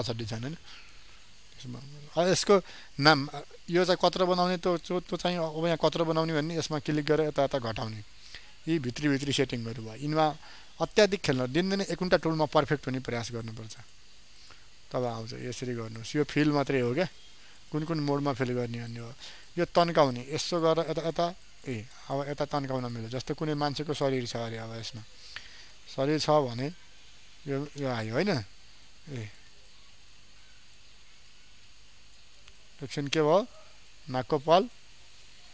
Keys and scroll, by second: 25.9 ctrl+space.